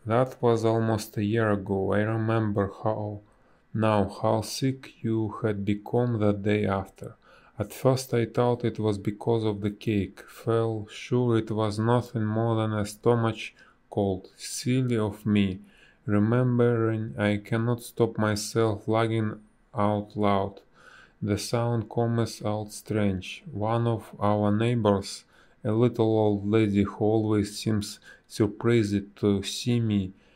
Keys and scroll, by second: 0.8 space, 2.7 b, 5.8 a, 8.2 space, 9.5 b, 10.0 space, 12.1 ctrl+z, 18.1 space, 18.6 a, 20.4 Delete, 25.4 ctrl+z.